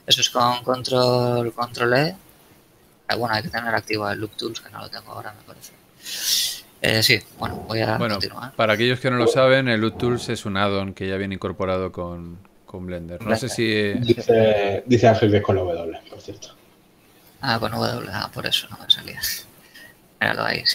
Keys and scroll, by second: 0.1 ctrl+w, 1.4 ctrl+e, 8.7 Tab, 10.4 a, 19.1 Tab.